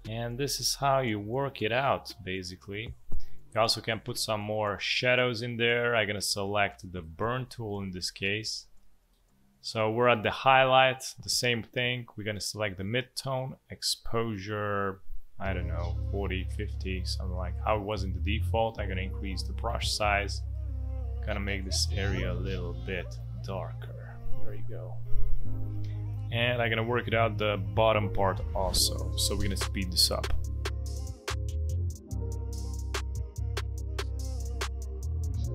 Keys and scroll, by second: 17.9 ctrl+z, 26.3 v, 28.1 space, 31.1 space, 32.5 Delete, 34.4 space, 35.3 space.